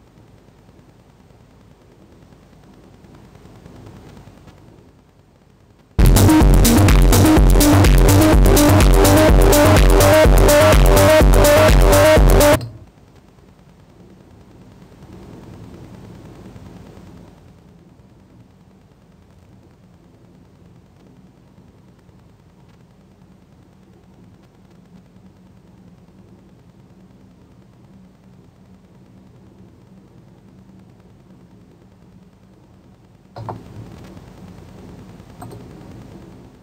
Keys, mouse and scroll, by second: 35.8-36.6 drag.